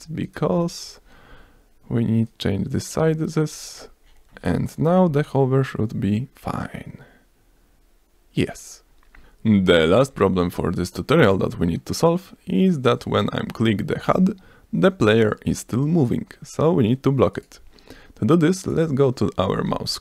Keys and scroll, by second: 1.9 F1, 5.8 ctrl+s, 6.5 s, 10.1 F5, 19.6 F3.